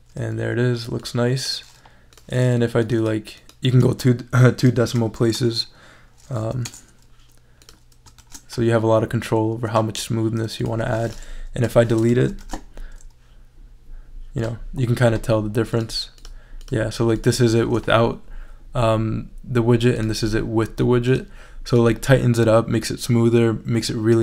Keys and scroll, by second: 4.7 ., 4.9 0, 6.4 |, 6.6 Return, 8.2 shift+super+e, 11.6 BackSpace, 12.2 super+BackSpace, 12.4 shift+super+e.